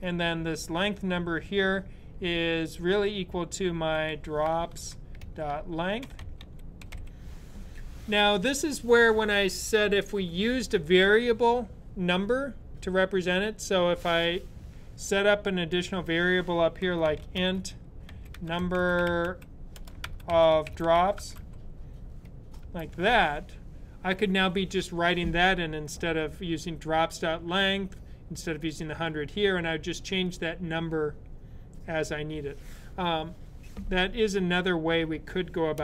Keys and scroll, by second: 3.4-7.3 typing, 16.4-22.5 typing.